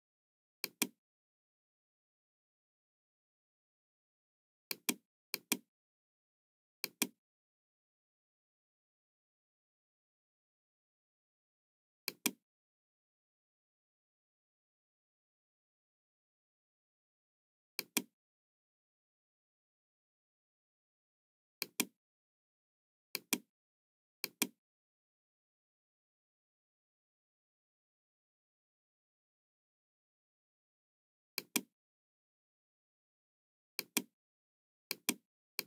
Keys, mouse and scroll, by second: 0.5 click, 4.6 click, 5.2 click, 6.8 click, 12.0 click, 21.5 click, 23.1 click, 24.2 click, 26.0-26.4 scroll up 1, 26.6-27.0 scroll down 1, 31.3 click, 33.7 click, 34.9 click, 35.5 click.